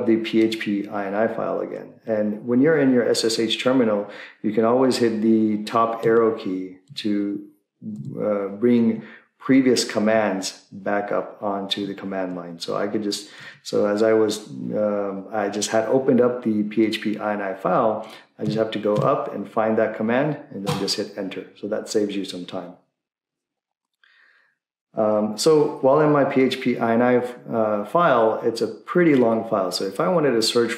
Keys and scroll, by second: 7.9 Up, 8.8 Down, 13.4 Down, 13.7 Down, 20.7 Up, 20.7 Return.